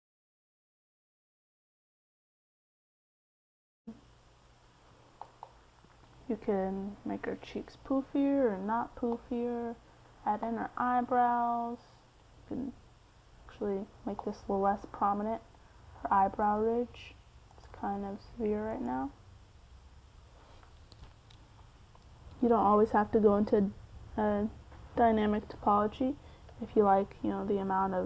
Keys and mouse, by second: 1.1-7.3 middle drag, 11.9 middle click, 12.8 right click, 15.4 click, 21.6-26.7 middle drag, 27.3 f.